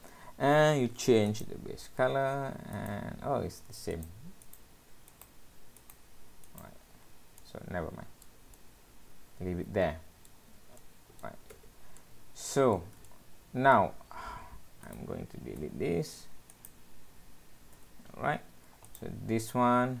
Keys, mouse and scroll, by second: 1.3 click, 7.1-7.4 scroll down 3, 7.4 middle click, 8.6 middle click, 10.8 middle click, 11.6 Tab, 12.0 middle click, 13.1 shift+middle click, 14.1 scroll up 1, 14.8 click, 15.6 Delete, 16.5 click, 17.8 Delete, 18.3-18.9 scroll up 1, 18.9 click, 18.9-19.6 scroll up 1.